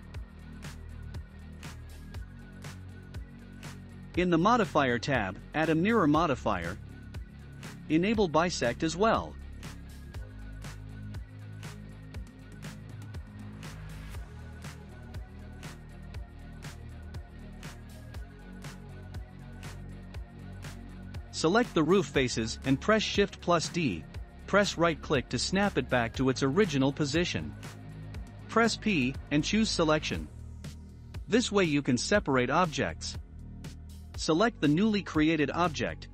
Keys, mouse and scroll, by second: 1.0 Tab, 2.0-2.8 drag, 2.8-4.1 middle drag, 4.1 click, 6.3-11.1 drag, 11.1-14.2 shift+middle drag, 15.1 click, 16.2 Tab, 19.4-22.4 drag, 30.3 p, 31.9 Tab, 32.9 click.